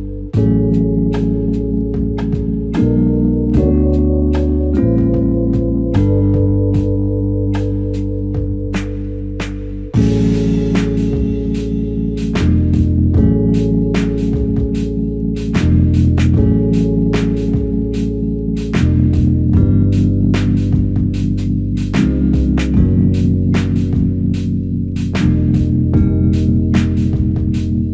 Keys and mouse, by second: 7.0 typing, 8.0 alt+click, 15.8 alt+click, 16.9 ctrl+click, 21.1 ctrl+alt+click, 24.2 alt+shift+click, 25.3 alt+click.